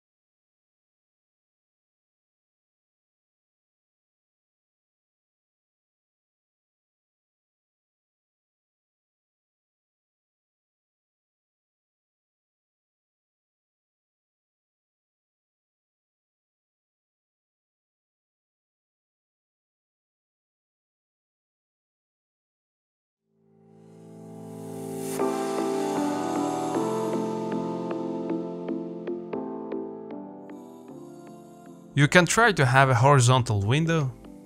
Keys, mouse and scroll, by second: 0.5 g, 2.7 KP_Divide, 3.8 middle click, 4.0-4.4 scroll up 1, 4.4 shift+middle click, 5.1-5.4 scroll up 3, 5.4-7.3 shift+middle drag, 7.3 g, 10.7 middle click, 11.7 scroll up 2, 11.9-13.4 shift+middle drag, 13.7 KP_Divide, 14.0 KP_1, 14.6-15.1 scroll up 1, 15.1 shift+middle click, 15.6 ctrl+click, 15.8 scroll up 1, 16.1 shift+middle click, 16.3-17.2 scroll up 1, 17.2 g, 19.5 scroll down 1, 19.7 middle click, 20.3 z, 20.5-21.6 scroll down 1, 21.6-21.9 scroll up 1, 21.9 s, 24.0 KP_Divide, 24.5-24.9 scroll down 5, 24.9 middle click, 25.1 scroll up 1, 25.4 s, 26.9 click, 27.1 scroll up 1, 27.2-27.6 scroll down 1, 27.6 middle click, 28.4-29.2 scroll up 1, 29.2 middle click, 29.9-30.5 scroll up 1, 30.5 ctrl+z, 31.6 r.